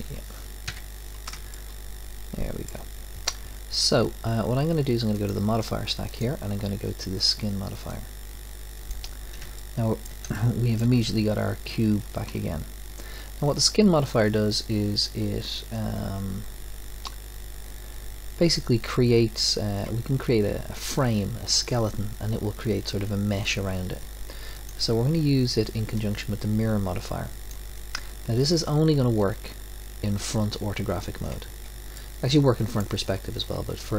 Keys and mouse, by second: 0.1 middle click, 0.7 KP_Decimal, 1.7-3.8 middle drag, 5.1-8.0 drag, 9.7-16.1 middle drag, 24.5-26.4 drag.